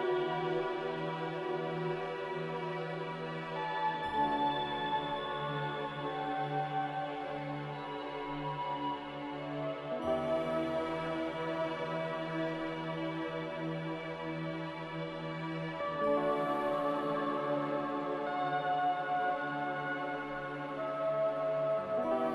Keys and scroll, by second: 17.3 z.